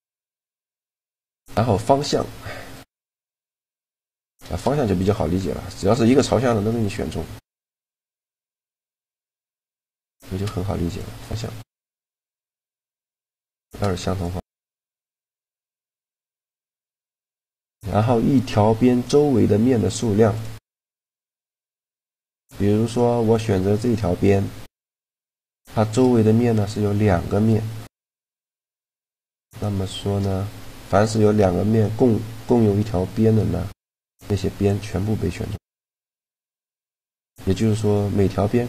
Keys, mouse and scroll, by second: 0.5 shift+g, 2.7 right click, 2.8 shift+g, 3.4 right click, 4.0 middle click, 4.5 middle click, 9.9-11.5 right drag, 10.2 shift+g, 13.1 a, 13.5 shift+g, 14.0 click, 14.5-15.5 drag, 14.8 shift+g, 16.0 a, 16.8 shift+g, 21.1-23.1 middle drag, 23.8-25.3 right drag, 24.4-25.9 middle drag, 28.2-29.5 middle drag, 29.5 shift+g, 35.5-38.6 middle drag.